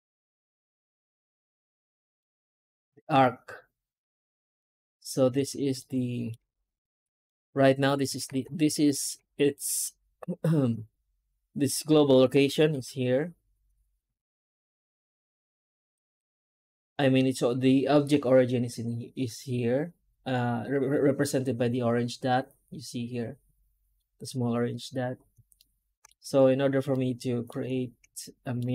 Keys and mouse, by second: 0.2 Tab, 1.0 a, 1.7 middle click, 2.0 middle click, 5.7 alt+middle click, 5.9 alt+middle click, 6.9 shift+middle click, 8.2 Tab, 8.7 shift+middle drag, 16.4 Tab, 25.4 shift+middle click, 25.9 middle click, 26.1 Tab, 26.8 alt+middle click, 28.1 shift+middle drag, 28.4 shift+middle click.